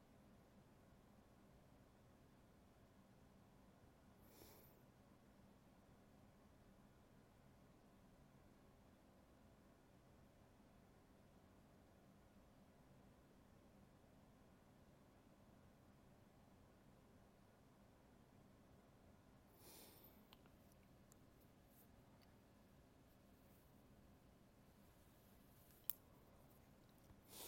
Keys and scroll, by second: 1.8 ctrl+z.